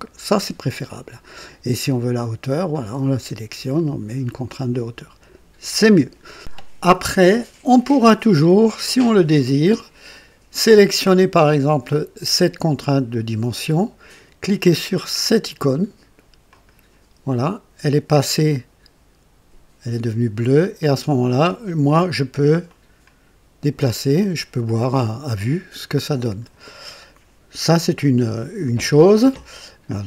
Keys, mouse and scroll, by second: 2.7 click, 3.7 click, 10.6 click, 16.4 click, 22.6-26.6 drag.